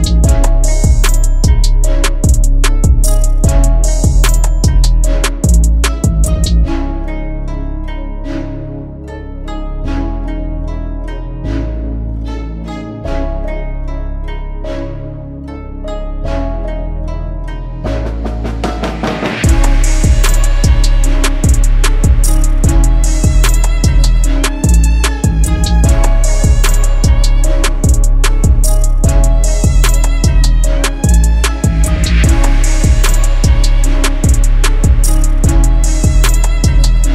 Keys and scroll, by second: 10.3 space, 25.3 5, 26.5 /, 26.9 2, 27.8 Return, 34.3 5, 35.4 /, 35.8 8, 37.0 Return.